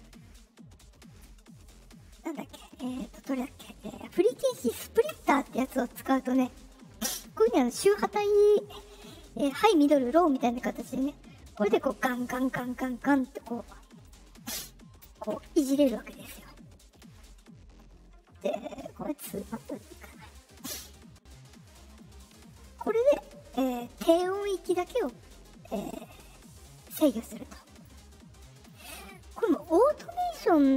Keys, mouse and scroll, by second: 5.0 click, 11.7-13.4 drag, 14.0 click, 15.8 ctrl+z, 19.5 click, 22.8-25.0 drag, 25.3 right click, 25.7 click, 26.9 click.